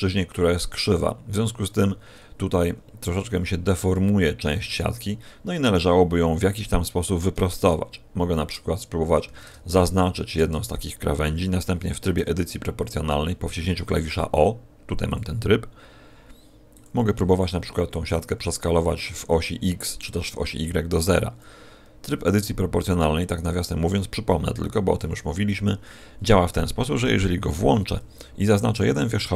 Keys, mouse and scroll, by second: 7.5 alt+shift+right click, 9.2 a, 9.7 alt+shift+right click, 12.1 o, 15.1 click, 23.2 right click, 26.5 o, 29.2 right click.